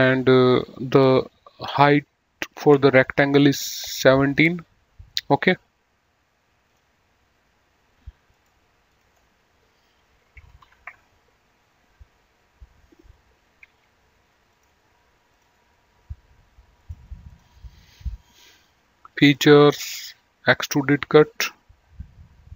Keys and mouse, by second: 6.8 click, 8.5 click, 10.8 KP_1, 11.0 KP_7, 11.2 Return, 11.2 KP_Enter, 13.8 Escape, 14.8 click, 15.6 click, 17.1 click, 19.5 click.